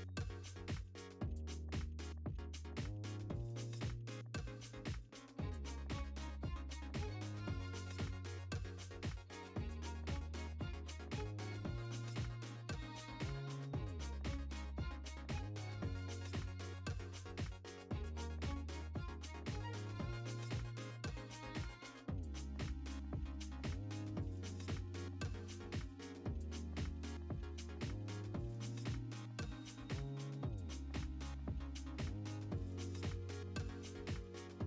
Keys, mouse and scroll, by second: 0.3 Tab, 0.9 KP_7, 2.2-3.5 drag, 3.5 scroll down 1, 3.8 `, 4.1 scroll up 1, 4.1 `, 5.0 scroll up 1, 5.1 `, 6.3-6.8 scroll down 2, 6.5 `, 6.6 alt+a, 6.8 `, 7.1 click, 7.3 scroll up 1, 7.7-8.1 right drag, 7.9 `, 8.1 click, 8.6 `, 9.7 scroll down 1, 10.6 click, 10.8 scroll down 1, 11.0 scroll up 1, 11.2 `, 11.7-15.2 drag, 12.3-12.8 scroll down 2, 12.8 KP_0, 14.9 alt+h, 15.0 alt+a, 15.5 alt+a, 15.7 `, 21.0 click, 21.8 s, 22.3 scroll down 1, 22.5 click, 24.2 `, 25.1 click, 26.0 `, 26.3 click, 26.5 scroll down 1, 26.6 `, 27.9 alt+d, 28.2 x, 28.3 click, 29.9-31.6 typing, 30.5 click, 31.0 click, 31.5 Tab, 31.9 ctrl+r, 32.7 alt+a, 33.1 3, 33.5 c, 34.1 ctrl+z, 34.5 Tab.